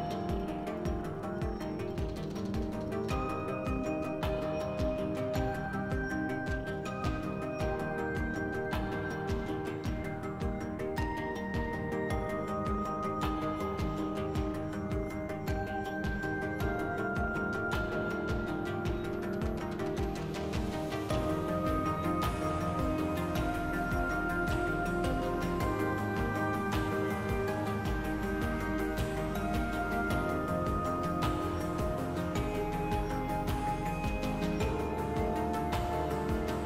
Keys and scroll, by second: 0.0-0.3 typing, 3.3 s, 4.9-6.4 typing, 9.0 3, 9.9 s, 12.6 s, 15.9 s, 20.6 3, 28.3 s, 29.6 s, 31.2-32.1 typing, 33.8 s, 35.4 s.